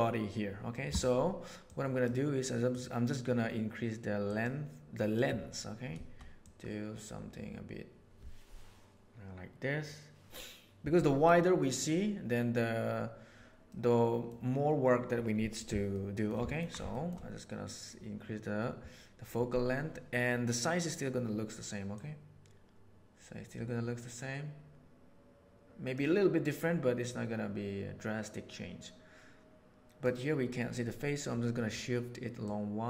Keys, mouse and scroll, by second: 1.5-2.1 drag, 4.2 click, 6.3-9.3 drag, 9.3-11.2 right drag, 13.7-14.2 middle drag, 15.8-16.1 shift+middle drag, 16.4 ctrl+middle click, 16.9 shift+middle click, 21.9-25.9 drag, 27.0-27.4 drag, 27.4-30.0 right drag, 32.3 click.